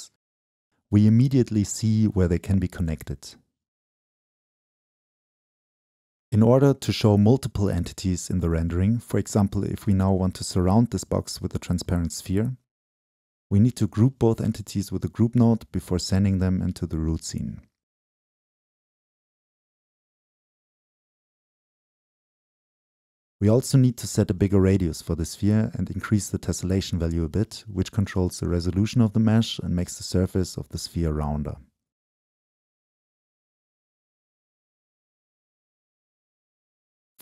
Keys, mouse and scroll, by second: 0.9-6.5 drag, 4.4 Right, 7.1 Right, 7.1-15.6 drag, 8.1 Up, 15.9-20.1 drag, 20.1 middle click, 20.7 shift+middle click, 21.8 shift+middle click, 22.0-25.1 shift+drag, 25.1 middle click, 25.7 click, 26.0 Left, 26.6 right click, 26.8-28.9 drag, 29.1-31.7 shift+drag, 32.1-32.9 scroll up 3, 32.9-34.3 middle drag, 34.3-37.1 scroll up 2, 37.1 middle click.